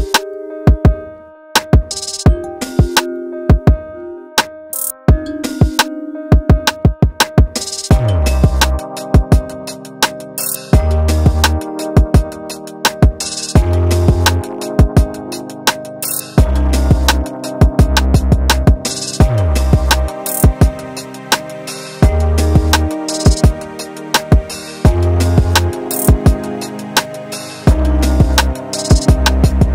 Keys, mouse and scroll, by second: 0.0 shift+middle click, 0.1 shift+middle click, 0.2-1.5 typing, 1.3 click, 2.4 middle click, 2.7 ctrl+z, 2.8 middle click, 3.3 middle click, 3.5 scroll up 3, 3.7 alt+click, 3.9 ctrl+r, 4.2 scroll down 3, 4.2 middle click, 4.3 ctrl+z, 4.4 middle click, 4.8 middle click, 4.8 scroll down 1, 4.8 middle click, 4.9 click, 5.0 middle click, 5.2 scroll up 4, 5.4 scroll down 1, 5.4 middle click, 6.8 middle click, 7.1 scroll up 1, 7.1 middle click, 7.3 scroll down 1, 7.4 middle click, 7.9 alt+click, 8.0 middle click, 8.2 alt+shift+click, 8.2 middle click, 8.7 middle click, 8.8 scroll up 2, 8.9 shift+middle click, 9.0 scroll down 3, 9.2 ctrl+z, 9.3 middle click, 9.4 scroll up 1, 9.6 ctrl+e, 10.0 `, 10.1 middle click, 10.3 alt+click, 10.5 ctrl+e, 10.6-10.9 scroll down 7, 10.6 middle click, 10.7 middle click, 10.9 middle click, 11.2 scroll up 1, 11.3 shift+middle click, 11.6 alt+Left, 11.7 middle click, 12.1 alt+shift+click, 12.2 ctrl+e, 12.3 scroll down 1, 12.4 shift+middle click, 12.7 scroll up 1, 12.7 shift+middle click, 12.9 alt+click, 13.1 ctrl+e, 13.2 middle click, 13.4 scroll up 1, 13.4 shift+middle click, 13.5 alt+click, 13.6 middle click, 14.1 alt+shift+click, 14.3 ctrl+e, 14.5 middle click, 14.7 click, 14.9 shift+click, 15.0 shift+click, 15.1 shift+click, 15.2 shift+middle click, 15.4 shift+middle click, 15.6 shift+click, 15.7 ctrl+e, 16.1 shift+middle click, 16.4 click, 16.5 l, 16.6 h, 16.7 shift+middle click, 16.9 scroll down 2, 17.0 click, 17.4 shift+click, 17.6 ctrl+e, 17.7 scroll down 2, 17.8 middle click, 17.9 alt+h, 18.0 middle click, 18.7 middle click, 19.3 shift+middle click, 19.5 scroll down 1, 19.5 shift+middle click, 19.7 alt+click, 19.9 shift+s, 20.7 middle click, 22.1 middle click, 22.5 click, 23.5 s, 23.9 e, 24.4 middle click, 24.6 alt+click, 24.7 ctrl+e, 24.9 scroll down 1, 24.9 middle click, 25.5 middle click, 25.8-26.1 l, 26.2 middle click, 26.3 p, 26.4 middle click, 26.6 scroll down 1, 26.6 middle click, 26.8 Tab, 26.9 click, 27.1 middle click, 27.3 click, 27.4 middle click, 27.9 click, 28.0 click, 28.1 middle click, 28.2 KP_1, 28.4 shift+middle click, 28.5 scroll up 2, 28.6 scroll down 10, 28.7 middle click, 28.9 shift+middle click, 29.2 shift+middle click.